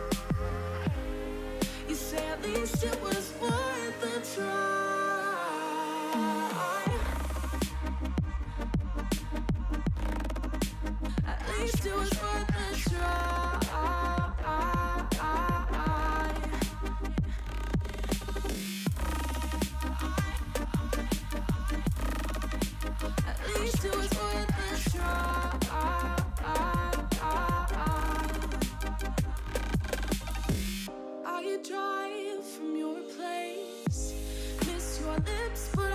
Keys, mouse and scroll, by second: 0.2-1.5 scroll up 1, 1.8 4, 1.9 3, 2.4 click, 2.7-4.1 middle drag, 4.1-5.0 scroll up 10, 5.0 shift+click, 5.8-6.2 scroll down 6, 6.2-7.9 middle drag, 12.0 scroll down 4, 12.2-12.9 middle drag, 12.9-13.6 scroll up 1, 13.6 click, 14.7 ctrl+z, 14.9 shift+click, 15.3-16.1 middle drag, 16.1 scroll up 3, 16.3-18.2 middle drag, 18.2-18.5 scroll up 4, 18.7 shift+click, 18.9 scroll down 4, 19.1-19.8 middle drag, 19.8 scroll up 1, 23.0-23.4 middle drag, 23.4-23.7 scroll up 2, 23.7-24.4 middle drag, 24.4 s, 25.5 ., 26.3 middle click, 26.6 s, 28.9 s, 30.2-30.8 middle drag, 30.8 ctrl+z, 31.0 ctrl+z, 31.7 i, 33.4 s.